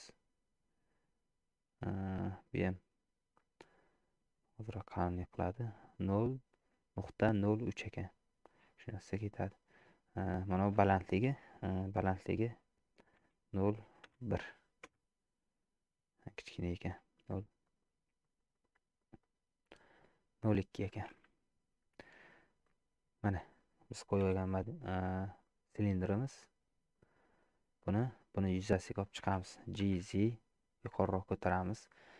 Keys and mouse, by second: 2.9 click, 4.3 click, 9.7-15.6 drag, 17.1 click, 17.6 click, 17.8 click, 18.1 click, 18.2 click, 18.5 click, 19.0 click, 19.2 click, 19.8 click, 22.7 middle click, 24.2 KP_Decimal, 25.5-27.0 middle drag, 28.0 middle click, 29.8 g.